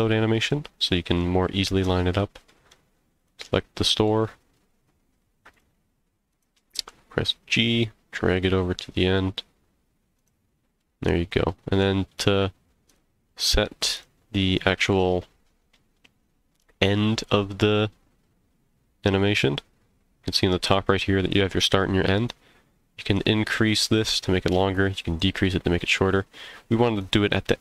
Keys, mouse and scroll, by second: 0.5 middle click, 2.5 middle click, 3.1 click, 4.1 h, 5.5 click, 6.3 click, 6.7 g, 10.2 click, 10.8-11.8 middle drag, 12.2 click, 12.9 click, 13.4 h, 13.9 click, 22.3 click, 24.5 click, 27.0 click.